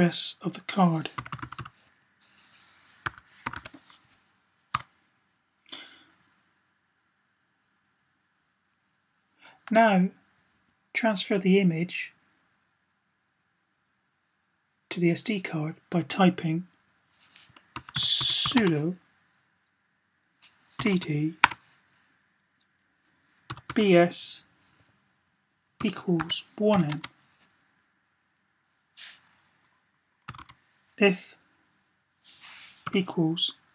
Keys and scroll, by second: 0.9-1.5 typing, 2.8-3.5 typing, 17.7-18.2 typing, 20.3-21.0 typing, 23.2-23.9 typing, 25.6-26.5 typing, 30.1 typing, 32.4-33.7 typing.